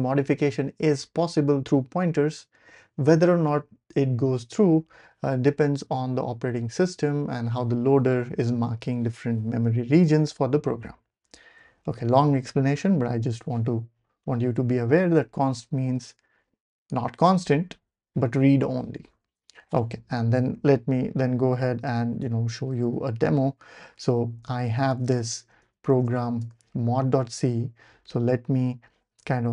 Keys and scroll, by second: 14.2 BackSpace, 20.6 y, 22.2 BackSpace, 22.5 ctrl+alt+super+p, 24.7-26.4 typing, 26.4 Return.